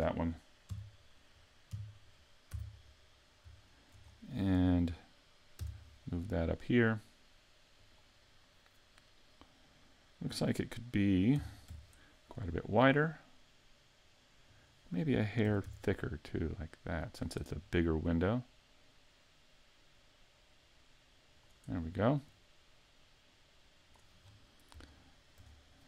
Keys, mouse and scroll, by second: 0.7 KP_3, 1.8 KP_5, 2.6 z, 3.7 shift+middle click, 4.1 scroll up 3, 5.6 shift+d, 7.9 click, 11.4 s, 14.6 click, 15.5 s, 17.2 click, 18.1 click, 22.3 click, 24.3-25.0 scroll down 4, 25.0 shift+middle click, 25.5 scroll up 3.